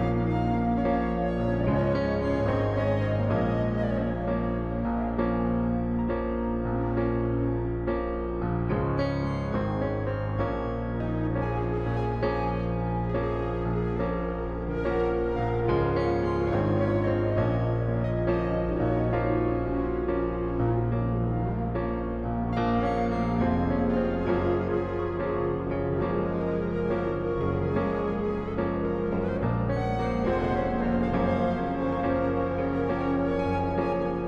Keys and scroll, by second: 4.0 ctrl+t, 22.5 Return.